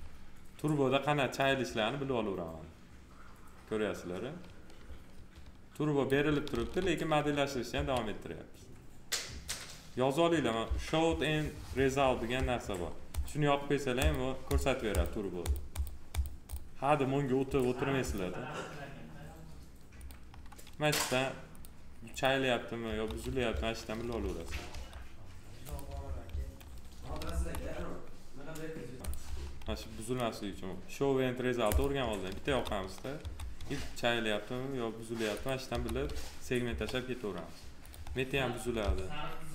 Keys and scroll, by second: 6.5 ctrl+z, 7.7 2, 22.8 F4, 27.2 F4, 32.4 F4, 35.6 F4, 38.7 alt+r.